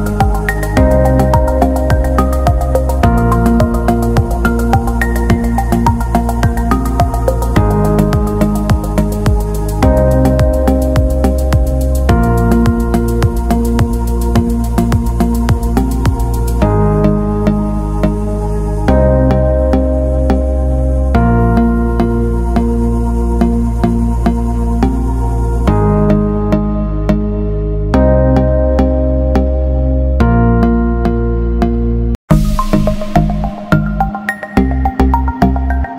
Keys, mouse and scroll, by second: 2.7 alt+scroll down 1, 3.6-4.3 scroll down 1, 4.3 click, 9.7 alt+scroll up 1, 11.7 click, 14.5 c, 16.9 click, 18.7 alt+Tab, 19.7 t, 20.3 click, 21.3 ctrl+v, 22.3 ctrl+a, 23.8 click, 30.6-30.9 alt+scroll up 1, 32.5 t, 32.8 click, 33.2 a, 34.1 click.